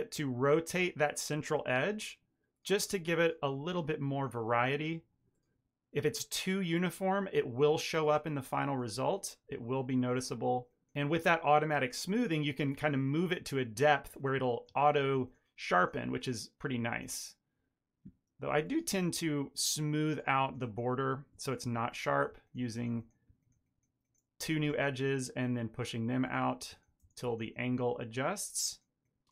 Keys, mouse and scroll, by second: 0.0 middle click, 0.1 ctrl+middle click, 0.7 ctrl+r, 1.0 ctrl+r, 1.6 shift+middle click, 1.7 ctrl+middle click, 2.1 alt+shift+click, 2.9 shift+middle click, 3.4 alt+s, 4.3 middle click, 4.5 ctrl+middle click, 4.6 Tab, 4.7 ctrl+middle click, 4.8 middle click, 5.3 middle click, 5.5 ctrl+middle click, 6.4 shift+middle click, 6.6 middle click, 6.8 shift+middle click, 6.9 middle click, 8.0 Tab, 8.4 click, 8.4 middle click, 9.2 ctrl+click, 9.3 ctrl+middle click, 9.6 r, 10.6 g, 12.0 click, 12.4 ctrl+click, 12.8 r, 13.3 g, 14.2 click, 14.5 ctrl+click, 14.8 r, 15.5 click, 15.8 ctrl+click, 16.1 r, 16.7 middle click, 17.2 click, 17.6 click, 18.5 ctrl+click, 18.7 shift+middle click, 18.8 ctrl+middle click, 19.0 ctrl+middle click, 19.3 ctrl+b, 20.7 1, 20.9 click, 21.3 click, 21.4 shift+click, 22.1 m, 22.3 shift+middle click, 22.9 click, 23.2 shift+click, 23.5 m, 24.2 2, 24.8 alt+click, 25.3 shift+click, 25.4 shift+middle click, 25.7 shift+middle click, 26.3 shift+click, 26.6 shift+click, 26.9 shift+click, 27.0 ctrl+middle click, 27.3 middle click, 27.8 alt+s, 28.6 shift+middle click, 28.7 ctrl+middle click, 29.0 shift+click.